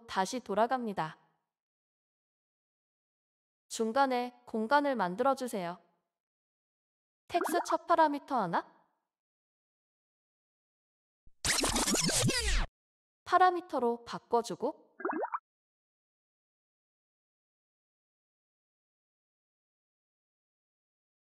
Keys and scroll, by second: 7.2 d, 7.8 3, 13.1 BackSpace.